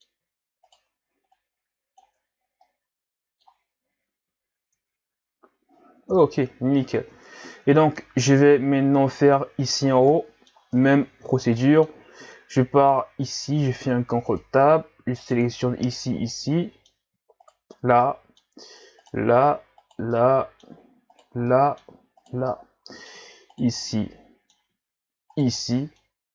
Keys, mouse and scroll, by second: 0.6 shift+right click, 1.3 click, 2.2 Tab, 2.4 scroll down 1, 2.6-3.9 middle drag, 3.9 ctrl+z, 4.3 ctrl+z, 4.8 Tab, 5.2-6.1 scroll down 4, 6.1 KP_1, 6.9-8.7 scroll up 8, 8.7-10.1 scroll up 5, 10.1-10.8 middle drag, 10.8 Tab, 11.4 scroll down 1, 11.6 middle click, 12.0-12.3 scroll up 1, 12.3-13.4 middle drag, 13.4 ctrl+Tab, 15.2 shift+right click, 15.8 shift+Right, 15.8 right click, 16.3-17.5 middle drag, 17.5 shift+Right, 17.5 right click, 18.1 middle click, 19.0 shift+Right, 19.0 right click, 19.8 shift+Right, 19.8 right click, 20.1-21.1 middle drag, 21.1 shift+right click, 21.5 middle click, 22.2 shift+right click, 22.5-23.6 middle drag, 23.6 shift+right click, 23.9-25.4 middle drag, 25.4 shift+right click, 25.6-26.3 middle drag.